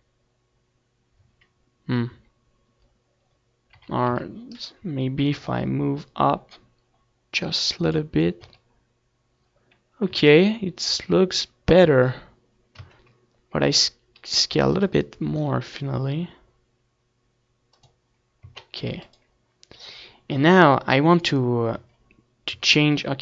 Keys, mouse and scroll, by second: 0.5 right click, 0.5 g, 1.7-3.0 drag, 3.0 a, 3.9 a, 5.6 r, 6.5-8.1 right drag, 7.2 g, 9.9-11.4 drag, 10.4 Tab, 11.7 middle click, 12.1 ctrl+s, 14.7 Tab, 15.5 s, 16.7-18.4 drag, 17.2 g, 19.8-21.5 drag, 20.4 Tab, 21.0 ctrl+s.